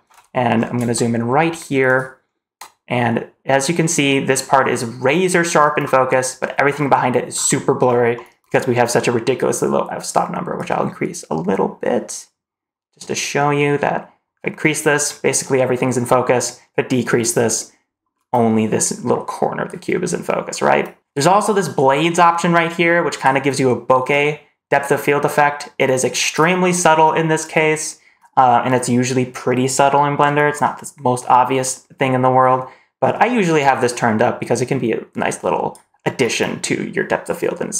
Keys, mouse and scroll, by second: 0.3-0.6 scroll up 2, 0.8-1.1 shift+middle drag, 1.3 shift+scroll down 1, 6.6-10.4 scroll down 4, 10.4 click, 10.4-10.9 scroll down 1, 22.4 click, 24.0 click, 33.5-35.6 drag.